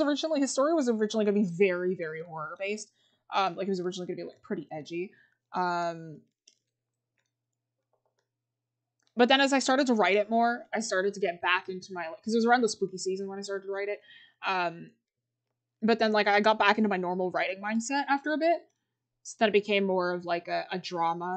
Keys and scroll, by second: 3.3 scroll.